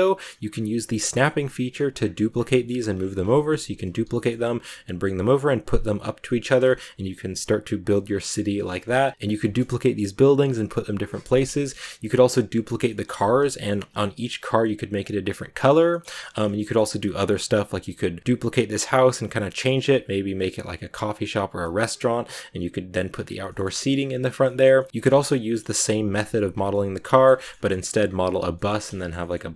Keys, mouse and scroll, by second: 1.1 right click, 1.4 middle click, 1.9-2.3 scroll down 1, 2.3 middle click, 2.8-3.2 scroll up 2, 3.2 shift+d, 4.0 g, 6.2 middle click, 6.4 a, 6.6-7.8 shift+middle drag, 7.8 right click, 8.4 middle click, 9.1 a, 9.3 shift+middle click, 9.5-11.0 scroll up 1, 11.0 scroll up 1, 11.0 middle click, 11.7-12.3 scroll up 1, 12.3 right click, 13.0-13.7 scroll up 1, 13.7 a, 15.4-15.8 scroll down 1, 15.8-21.9 middle drag, 21.9-22.5 scroll up 1, 22.5 right click, 23.4 shift+middle click, 23.6 a, 23.9-24.4 scroll down 1, 24.4-26.0 shift+middle drag, 26.0 KP_Decimal, 26.5 scroll down 2, 26.5 scroll up 1, 26.6-27.7 middle drag, 27.7-28.5 scroll down 1, 28.5 middle click, 29.1-29.5 scroll up 1, 29.5 scroll down 1.